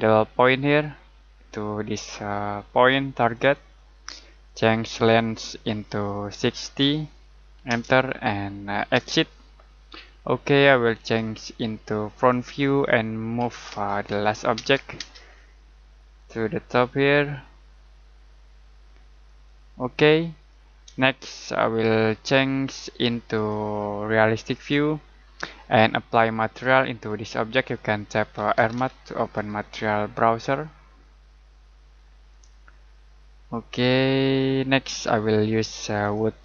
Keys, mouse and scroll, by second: 2.9 click, 3.3 click, 6.3-6.8 typing, 7.6 Return, 11.0 click, 13.3 m, 13.7 space, 14.5 space, 15.3 scroll down 1, 16.1 click, 19.3 click, 20.1-20.5 scroll down 1, 20.5 middle click, 22.6 middle click, 23.3 click, 25.8 middle click, 28.3-29.2 typing, 31.6 typing, 32.3 click, 36.0 click.